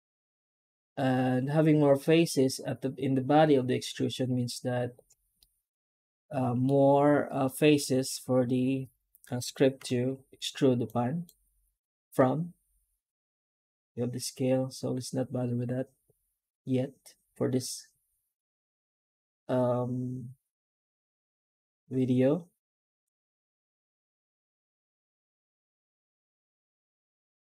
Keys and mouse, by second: 5.3-6.5 middle drag, 7.6-9.4 middle drag, 9.6 F9.